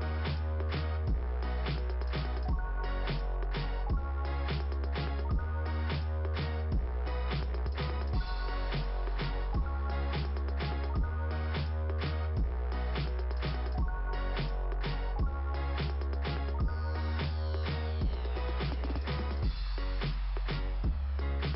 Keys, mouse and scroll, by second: 0.0 click, 0.7 click, 7.2-7.8 scroll down 2, 10.7 click, 12.9 click, 16.2 click, 17.2 scroll down 1, 17.5 click, 18.7 scroll down 1.